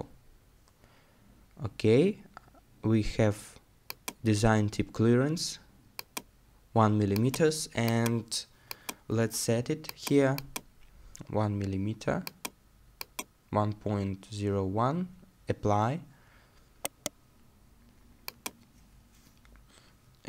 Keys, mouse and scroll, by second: 16.8-18.6 scroll up 1, 18.6 right click.